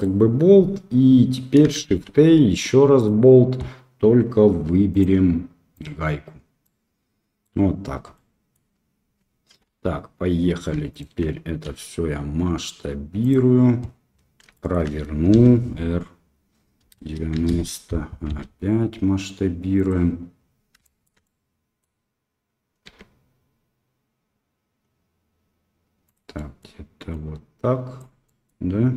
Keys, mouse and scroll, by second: 1.8 shift+a, 4.9-6.0 drag, 6.6-7.4 middle drag, 8.1-8.5 middle drag, 9.6 KP_1, 10.9 shift+click, 11.6 s, 14.5 shift+middle click, 15.3 r, 18.2 s, 20.8 shift+middle click, 21.2 middle click, 22.8 s, 26.3 middle click, 27.1 click, 28.2 middle drag.